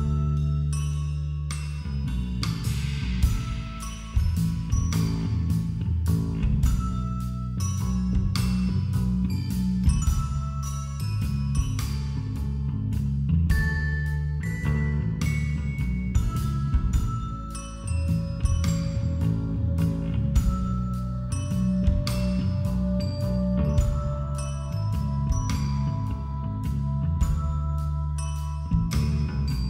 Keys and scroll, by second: 2.0 ctrl+-, 8.1 ], 9.6 ctrl+-, 15.9 ctrl+-, 17.9 ctrl+=, 18.9 ctrl+-, 19.1 ctrl+=, 19.4-20.2 typing, 22.2 ], 23.8 [, 26.1 ].